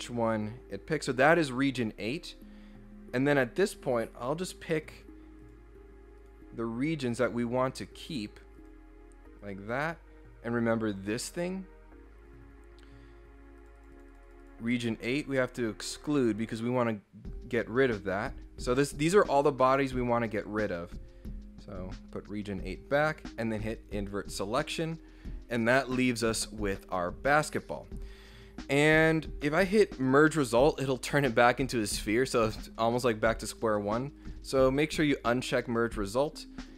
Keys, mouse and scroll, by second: 2.2 scroll down 1, 4.1 click, 4.7 click, 5.4 click, 6.2 click, 7.1 click, 7.9 click, 8.6 click, 9.4 click, 11.3 click, 13.6 click, 13.8 click, 13.9 click, 14.1 click, 14.2 click, 14.4 click, 16.5 click, 21.7 click, 23.8 click, 34.2 click, 36.6 click.